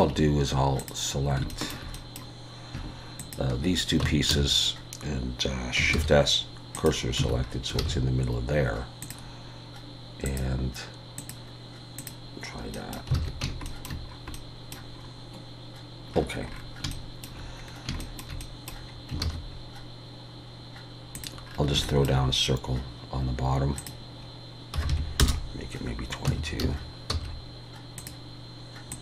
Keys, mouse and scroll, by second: 0.8 click, 1.5 shift+middle click, 1.9 middle click, 3.2 shift+click, 4.0 Tab, 4.3 a, 6.0 shift+s, 7.2 Tab, 7.4-7.8 scroll down 3, 7.8 alt+a, 9.0 click, 10.6 click, 12.7 middle click, 13.2 alt+a, 13.5 shift+scroll up 1, 13.7 shift+middle click, 14.1-14.4 scroll up 2, 14.3 middle click, 15.0 scroll up 3, 16.1-16.5 scroll down 5, 16.3 scroll up 1, 16.5 scroll down 3, 16.9 shift+middle click, 17.7 scroll down 1, 18.0 shift+middle click, 18.4 middle click, 19.2 shift+a, 21.5-21.9 scroll down 3, 21.8 shift+middle click, 23.8 click, 24.9 2, 26.3 Tab, 26.6 a, 27.1 s, 28.9 click.